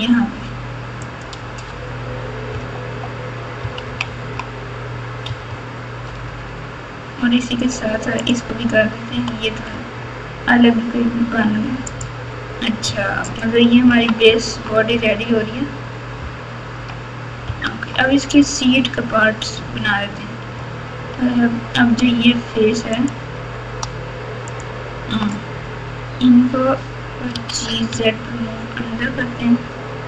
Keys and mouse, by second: 1.1 click, 1.4 Tab, 2.5 KP_8, 3.6 KP_6, 3.8 KP_6, 4.0 KP_6, 4.2 KP_6, 5.2 KP_4, 5.4 KP_4, 6.0 KP_4, 6.2 Tab, 8.1 click, 9.1 g, 12.8 Tab, 13.8 KP_3, 16.7 KP_6, 17.4 KP_8, 17.6 Tab, 22.0 3, 22.9 click, 24.5 shift+click, 27.3 g.